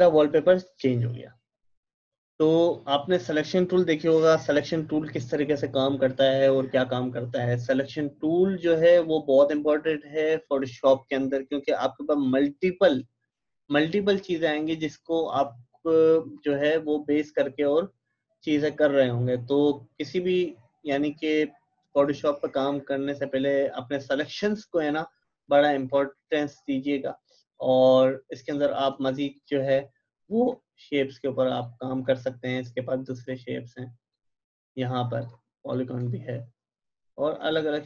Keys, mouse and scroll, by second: 8.9 click, 14.1 click, 16.4 click, 27.6-37.8 drag.